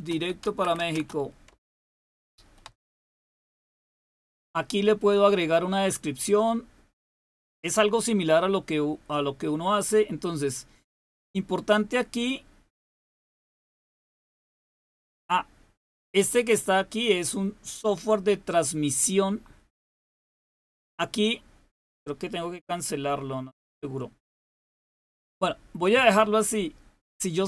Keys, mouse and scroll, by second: 0.0-3.6 typing, 6.0 click, 7.4-9.5 scroll down 1, 9.5-12.6 scroll down 1, 12.6 click.